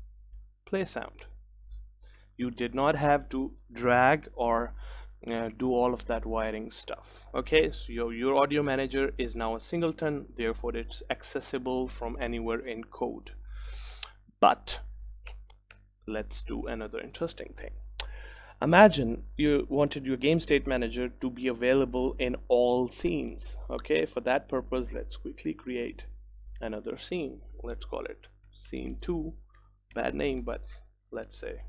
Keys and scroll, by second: 1.3 Return, 2.9 ctrl+s, 16.8 ctrl+s.